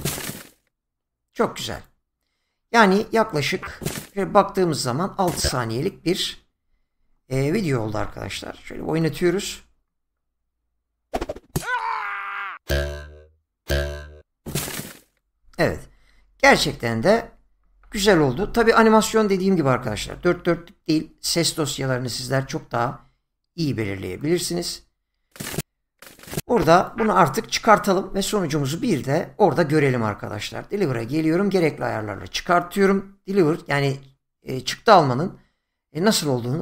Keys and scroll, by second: 8.0 ctrl+f.